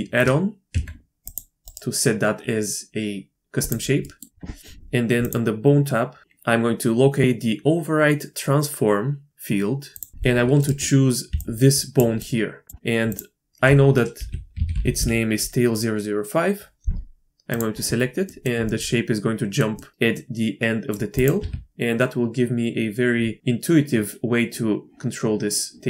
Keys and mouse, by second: 0.7 Tab, 1.2-4.0 drag, 4.0 middle click, 9.9 click, 11.3-12.1 d, 11.4-13.0 drag, 12.7 d, 13.0 d, 14.0-17.6 drag, 18.2 click, 18.7-19.6 drag, 19.8 click, 20.1 click, 21.1 click, 21.4 r.